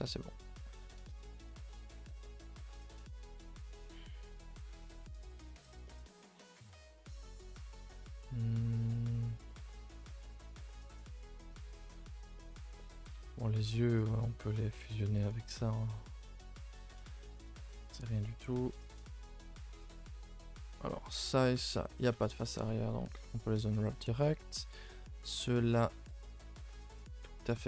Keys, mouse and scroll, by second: 0.1 middle drag, 0.3 scroll up 1, 0.4 scroll down 2, 0.6-1.3 middle drag, 1.3 a, 1.4 a, 1.6-5.6 shift+middle drag, 5.9-7.1 middle drag, 7.1 a, 7.2 a, 9.5 middle click, 10.2-10.6 scroll up 2, 10.6-11.6 middle drag, 11.6 click, 11.9 shift+middle click, 12.1 scroll up 2, 12.4-13.5 middle drag, 13.5 shift+click, 13.9-14.8 middle drag, 14.8 scroll down 2, 15.1-17.5 middle drag, 17.5 ctrl+j, 17.9 a, 18.1 a, 18.6 click, 18.7 Tab, 19.0 scroll up 4, 19.3 a, 19.5 a, 19.7 shift+middle click, 19.9 scroll up 1, 20.2-21.1 scroll down 1, 21.1 l, 21.4 l, 22.6 u, 23.0 a, 23.2 a, 24.0 middle click, 24.3 a, 24.5 a, 25.2 l, 25.6 l, 27.1 u.